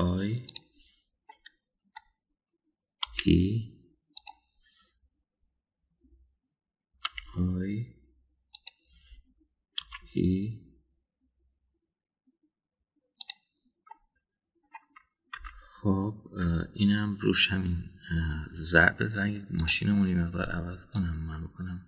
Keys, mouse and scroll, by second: 0.7 i, 0.9 middle click, 2.3 middle click, 2.4 typing, 4.0 e, 8.1 i, 10.8 e, 14.8-15.7 middle drag, 16.3 Tab, 17.3 Tab, 20.6 drag.